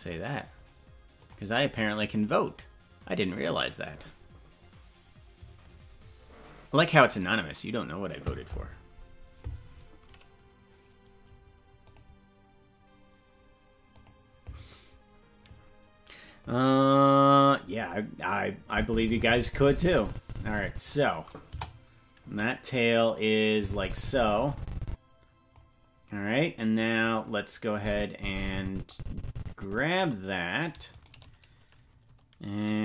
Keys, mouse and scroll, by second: 18.7-20.9 drag, 21.4 KP_0, 23.5-25.6 drag, 27.7-30.0 drag, 30.9-32.7 right drag.